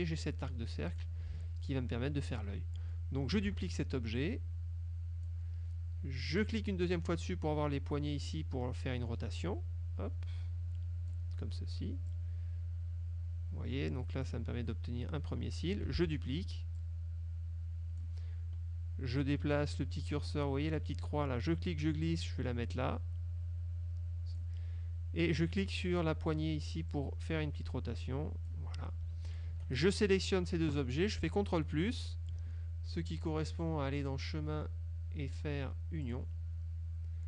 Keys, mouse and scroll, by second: 0.3-1.3 drag, 1.4 ctrl+z, 3.6 ctrl+d, 4.3-5.6 drag, 6.5 click, 9.5-11.4 drag, 12.2-14.5 drag, 16.0 ctrl+d, 16.8-18.2 drag, 21.6-24.7 drag, 27.0-28.8 drag, 29.4 shift+click, 30.2-31.3 scroll up 2, 31.3-33.0 ctrl+scroll up 1, 34.1 click, 36.2 click.